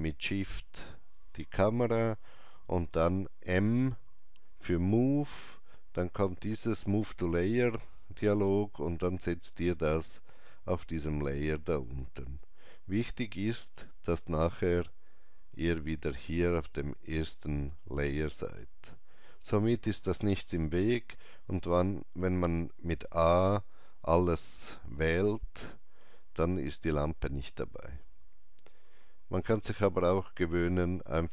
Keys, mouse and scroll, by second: 4.5 shift+click, 4.5 m, 10.5 shift+click, 10.5 m, 16.6 click, 16.6 m, 20.8 click, 22.9 a, 24.5 scroll up 1, 27.8 scroll down 1, 29.2 click.